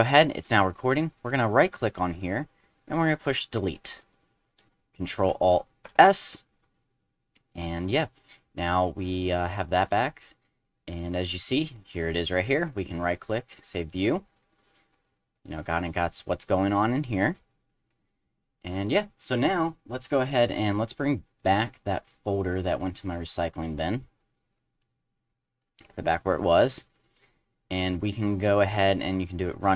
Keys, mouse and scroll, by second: 1.2 right click, 3.9 click, 5.9 ctrl+alt+s, 9.9 click, 11.7 click, 12.5 right click, 13.8 click, 14.8 middle click, 15.1 middle click, 15.4 `, 16.0-17.1 middle drag, 17.9 click, 21.4 click, 22.7 click, 23.4-24.6 drag, 25.6-25.9 drag, 26.3 click, 26.9-27.3 drag, 27.9 click.